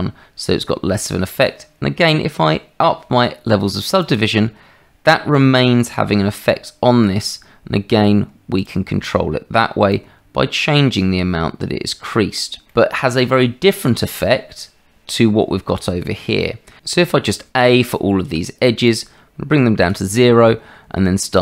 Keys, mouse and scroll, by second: 4.0 click, 5.7-6.9 middle drag, 10.0-11.5 drag, 11.5-12.6 middle drag, 17.3 a, 18.8-19.9 drag, 21.3-21.4 drag.